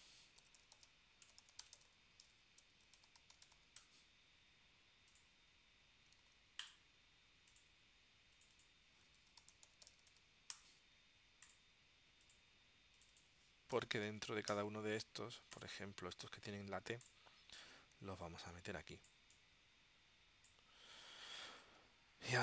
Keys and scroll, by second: 0.2-4.2 typing, 6.3 super+z, 9.0-10.6 typing, 10.7 Return, 13.6-14.9 typing.